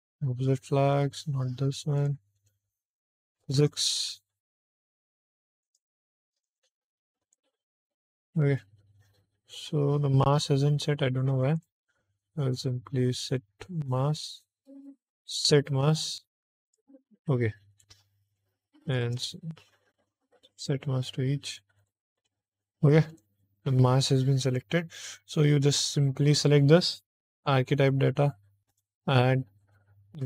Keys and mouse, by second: 1.9 click, 2.2 click, 3.5 click, 5.5 click, 6.3 click, 7.1 click, 7.6 click, 11.4 click, 15.3 click, 16.5-17.6 drag, 18.2 click, 18.8 shift+click, 20.4 click, 21.7 click, 22.0 click, 23.0 click, 24.5 middle click, 25.7 click, 27.2 click, 28.6 click.